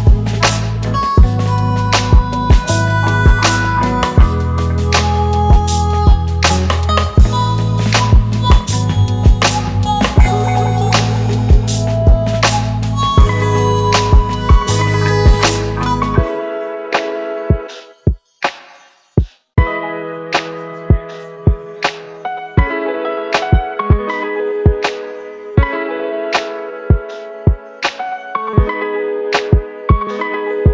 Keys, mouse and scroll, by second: 4.3-6.6 typing, 5.4 double click, 6.5 double click, 6.9 double click, 8.8-9.5 typing, 9.5 double click.